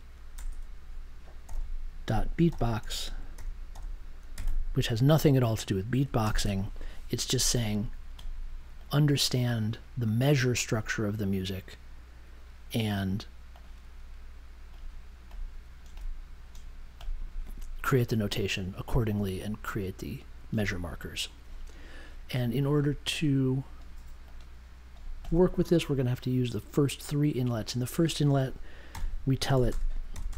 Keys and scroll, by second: 0.3 BackSpace, 1.4 c, 2.0 ., 2.4 b, 3.7-4.9 typing, 6.2 super+j, 28.9-30.3 typing.